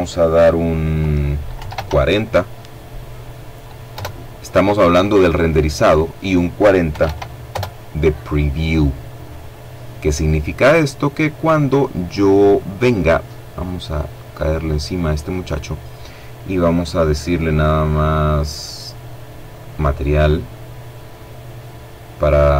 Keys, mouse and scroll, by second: 0.6 KP_4, 0.8 KP_0, 3.0 KP_Enter, 5.0 click, 6.0 KP_4, 6.1 KP_0, 6.6 KP_Enter, 13.1 click, 15.8 click, 18.6 click.